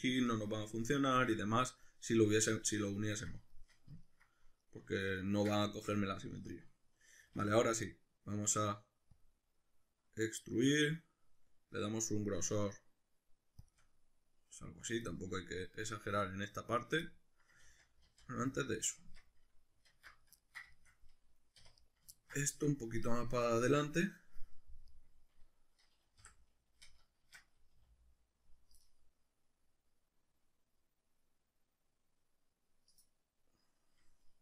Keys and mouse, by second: 1.5 middle click, 3.5-4.6 shift+middle drag, 5.6 shift+middle click, 7.2 alt+e, 13.7 shift+click, 13.8-14.8 middle drag, 15.1 shift+middle click, 15.3 middle click, 15.6-20.1 shift+middle drag, 17.7 ctrl+z, 19.0 Tab, 19.9 alt+q, 21.6 1, 21.8 right click, 22.1 ctrl+middle click, 22.6-24.9 middle drag, 24.9 right click, 26.2 o, 27.2 shift+Tab, 27.7 g, 33.0 click.